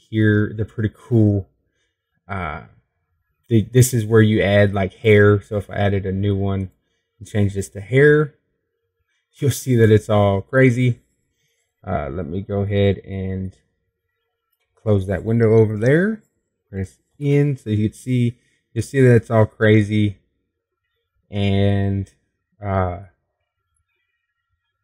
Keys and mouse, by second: 10.1-11.2 drag, 11.6-15.4 middle drag, 16.1-17.1 drag, 18.0-20.8 middle drag, 19.8 n.